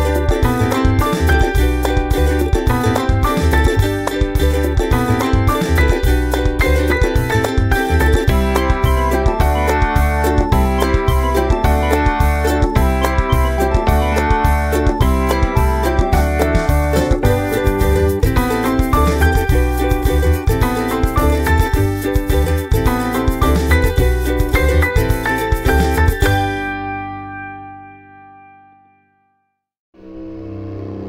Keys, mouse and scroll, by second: 2.4 click, 3.0-7.3 drag, 8.0-8.8 scroll up 6, 9.4 scroll up 2, 10.0 scroll up 2, 11.2-11.8 scroll up 4, 12.2 scroll down 4, 13.3 click, 13.5 click, 14.2 scroll up 2, 14.7-16.5 drag, 21.8 click, 22.6-23.6 typing, 23.9 click, 25.5-26.7 scroll down 2, 26.8-28.0 scroll down 4, 28.0 click, 28.6-31.0 drag.